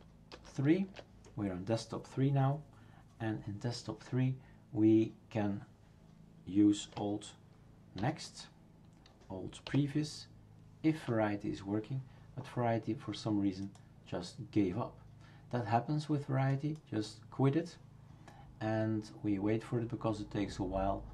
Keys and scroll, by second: 0.3 super+", 8.0 alt+n, 9.7 alt+p.